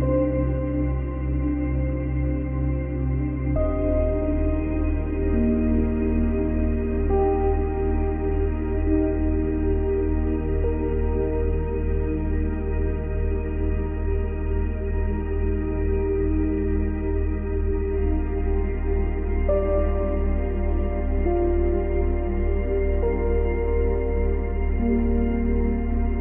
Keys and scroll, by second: 20.0 space, 21.5 space.